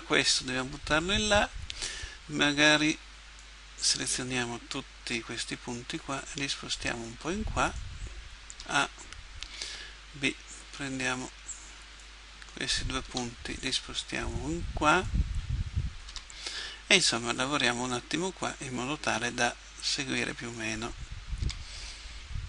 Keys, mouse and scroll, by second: 5.9 right click, 6.3-7.9 drag, 8.5 a, 9.5 b, 13.2 g, 16.1 a, 16.5 b, 19.1 g, 21.5 a.